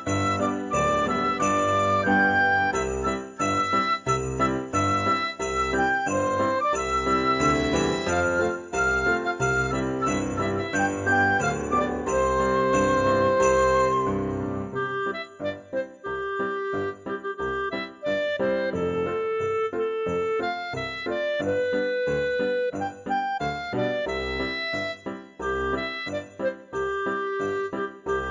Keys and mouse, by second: 0.6 click, 2.5 click, 4.4 g, 4.7 z, 6.4 click, 7.3 ctrl+r, 7.9 click, 9.5 right click, 10.9 click, 11.6 g, 12.5 z, 14.5 click, 15.7 middle click, 16.7 shift+click, 17.5 middle click, 18.3 g, 18.8 z, 20.7 click, 21.4 ctrl+r, 22.0 click, 22.5 right click, 23.1 ctrl+r, 23.7 click, 24.2 right click, 24.6 middle click, 25.4 click, 26.6 middle click, 27.2 click, 27.7 middle click.